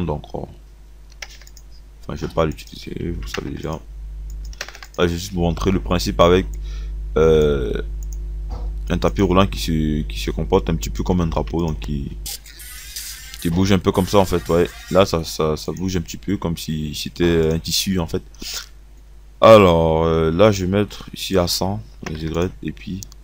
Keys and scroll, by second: 3.2-5.4 typing, 11.5 KP_2, 13.2 space, 22.0 KP_1.